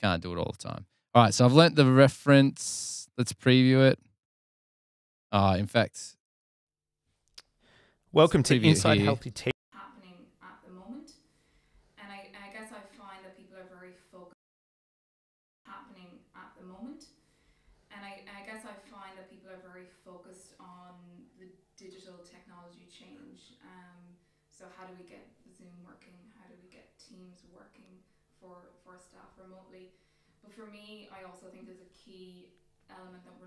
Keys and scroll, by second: 6.8 super+[, 8.9 space.